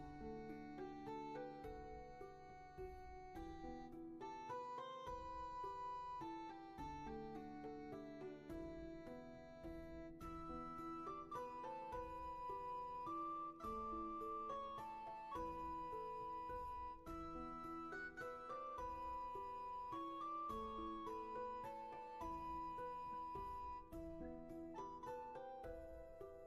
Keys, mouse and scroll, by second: 6.4 ctrl+z, 10.2 ctrl+z, 17.6 ctrl+z, 19.7 ctrl+z.